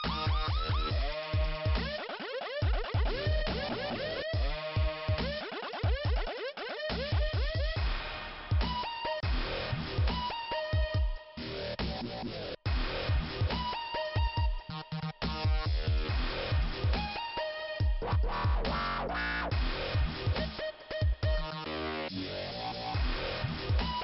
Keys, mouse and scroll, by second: 0.5 click, 0.6 click, 1.8 scroll down 2, 3.2 click, 3.3 click, 4.1 click, 4.2 click, 4.8 click, 4.8 click, 7.3 click, 7.4 click, 8.0 click, 8.1 click, 9.1 scroll down 3, 9.3 scroll up 1, 9.3 scroll down 1, 9.4 scroll up 1, 14.2 click, 14.8 click, 15.4 click, 15.5 click, 16.1 click, 16.2 click, 17.1 click, 17.3 click, 18.3 click, 19.6 click, 19.7 click, 21.3 click, 21.4 click, 23.7 click.